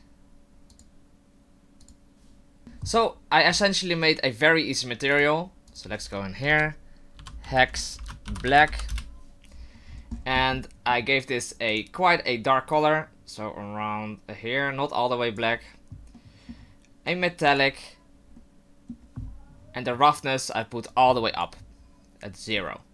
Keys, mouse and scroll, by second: 0.7 click, 3.5-3.9 scroll up 4, 5.1 click, 5.7 click, 9.9-11.2 scroll up 17, 10.6 middle click, 11.7 click, 16.1 middle click, 17.1 click, 20.9 click, 22.5 middle click.